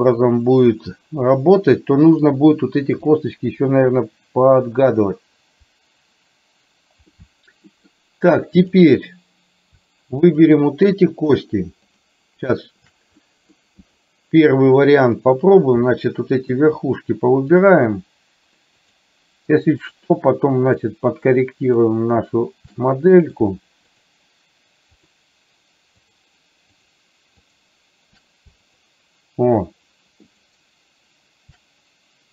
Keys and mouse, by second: 7.2 middle click, 8.7 click, 10.4 shift+click, 11.2 shift+click, 12.0 shift+click, 13.2 middle click, 16.6 shift+click, 20.0 shift+click, 21.7 shift+click, 22.9 middle click, 24.0 shift+click, 25.0 shift+click, 26.1 shift+click, 27.0 shift+click, 27.5 shift+click, 28.6 shift+click.